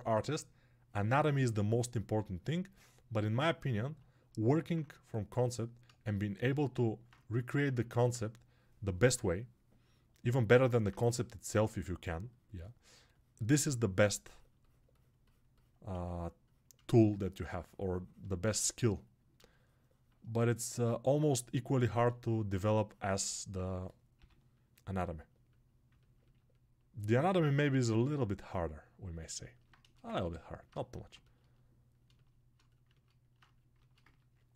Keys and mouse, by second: 0.1-5.8 drag, 10.3-34.5 alt+shift+drag.